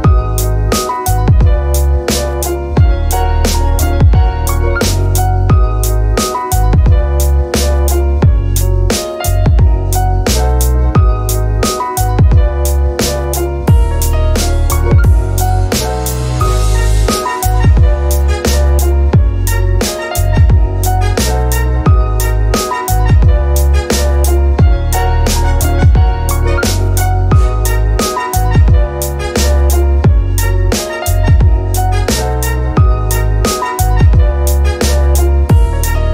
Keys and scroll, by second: 0.4-4.9 typing, 31.2 q.